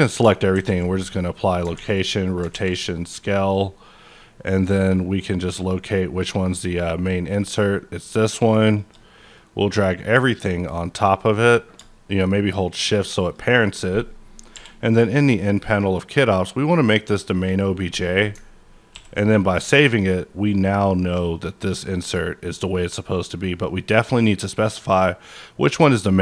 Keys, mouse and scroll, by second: 0.1 a, 1.4 click, 1.7 a, 2.2 click, 2.5 ctrl+a, 2.9 click, 3.3 middle click, 5.1 click, 8.0 click, 8.6 shift+click, 9.6 shift+click, 11.6 shift+click, 14.5 n, 15.7 click, 16.5 click, 18.9 ctrl+s.